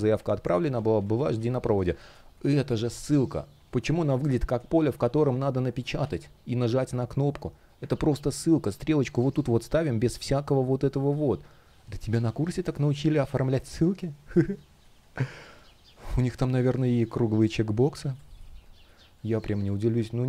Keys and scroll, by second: 0.4 super+я, 1.8 space, 5.7 super+я, 7.6 super+я, 10.7 space, 17.8 space.